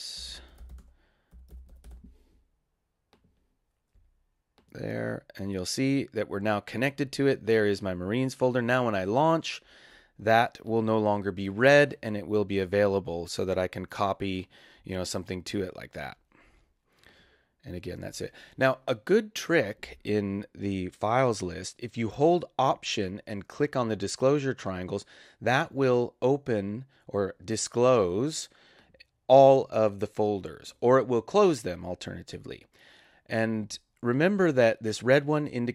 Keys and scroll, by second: 0.0-1.1 typing.